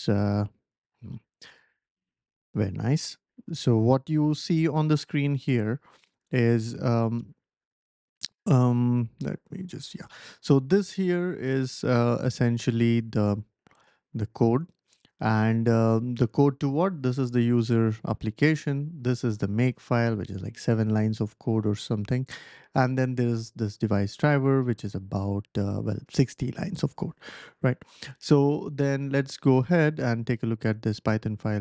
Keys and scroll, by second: 1.5 shift+super+=, 1.6 shift+super+=, 3.7 ctrl+l, 9.1 super+-, 9.3 super+-, 9.6 super+-.